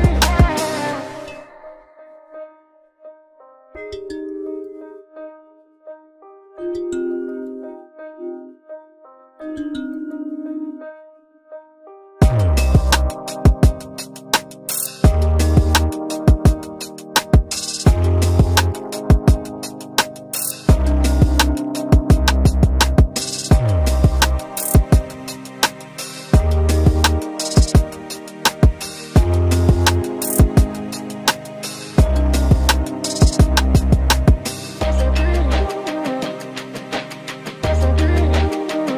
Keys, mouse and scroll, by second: 6.9 ctrl+g.